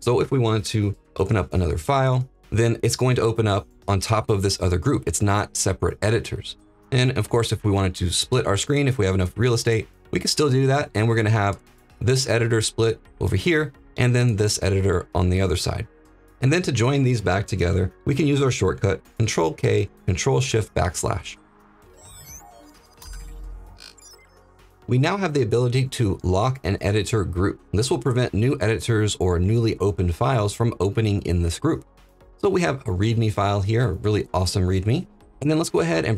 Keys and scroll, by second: 1.1 ctrl+p, 19.1 ctrl+k, 20.3 ctrl+shift+\.